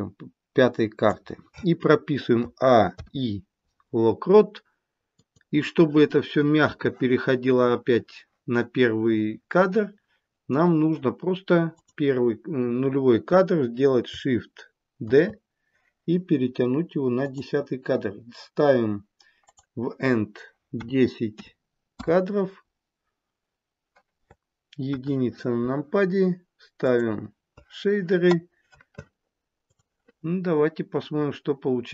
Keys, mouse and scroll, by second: 2.4 a, 2.9 a, 5.8 i, 11.6 click, 15.1 shift+d, 19.5 click, 24.7 KP_1, 27.0 click, 29.6 click.